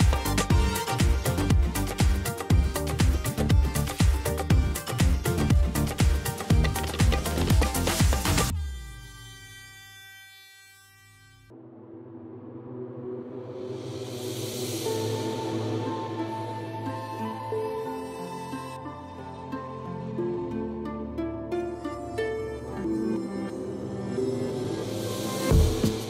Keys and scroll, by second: 4.1 space, 12.4 5, 19.1 space, 20.1 ctrl+d, 20.4 v, 20.7 ctrl+space, 20.9 ctrl+space.